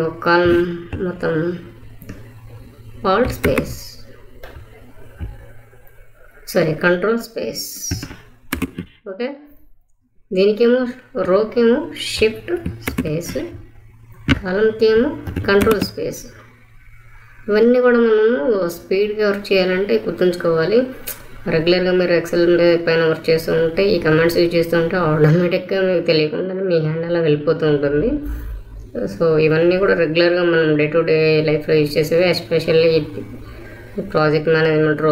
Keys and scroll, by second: 3.4 alt+space, 8.4 ctrl+space, 12.8 shift+space, 15.5 ctrl+space.